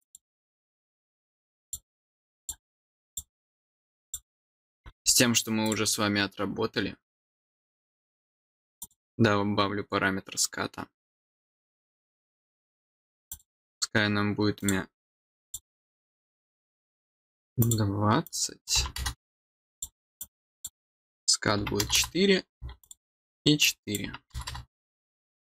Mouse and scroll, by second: 1.6 click, 2.3 click, 3.0 click, 4.0 click, 5.6 click, 8.7 click, 13.2 click, 14.5 click, 15.4 click, 15.8 click, 17.5 click, 18.2 click, 19.7 click, 20.1 click, 22.8 click, 23.6 click.